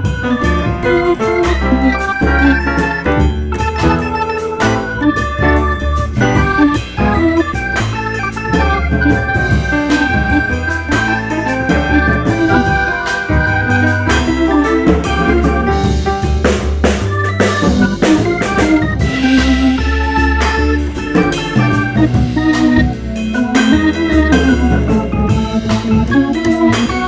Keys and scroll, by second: 1.2 2, 8.9 2, 9.6 F4, 11.7 F4, 13.2 F4, 14.5 F4, 15.3 F4, 16.7-18.0 typing, 21.0 F3, 23.8 F3, 25.6 ctrl+z.